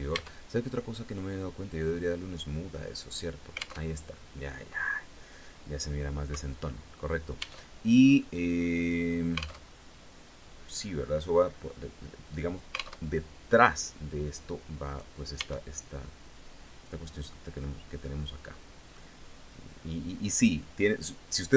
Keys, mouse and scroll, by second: 1.3 click, 2.6 scroll down 2, 3.4 alt+Tab, 7.2 alt+Tab, 7.7-9.3 middle drag, 9.3 alt+Tab, 12.6 alt+Tab, 14.5 right click, 14.9 Tab, 15.3-17.1 middle drag, 17.6-18.7 middle drag, 20.4 click.